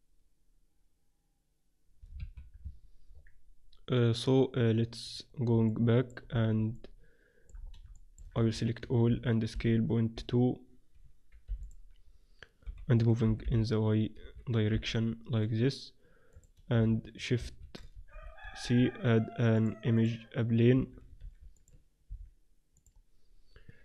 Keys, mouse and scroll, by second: 2.6 Tab, 3.0-5.0 middle drag, 5.6 middle click, 6.2 click, 6.8-10.2 middle drag, 8.3 a, 8.5 a, 8.8 a, 9.2 s, 12.0-14.3 middle drag, 12.8 KP_7, 13.4 g, 14.8 g, 16.8 c, 18.1 shift+c, 19.4 shift+a, 20.7 s, 22.2 s.